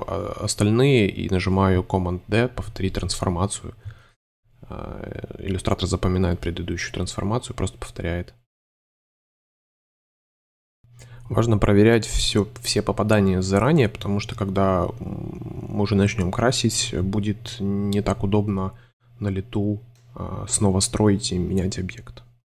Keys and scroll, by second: 0.3 space, 1.5 super+d, 4.0 space, 5.4 shift+Tab, 5.9 shift+m, 6.2 2, 7.4 shift+v, 8.5 shift+super+Tab, 8.6 shift+super+y, 11.1 m, 12.2 v, 13.9 shift+v, 14.8 space, 15.8 super+space, 17.2 alt+super+y, 17.3 super+v, 18.2 c, 20.1 v.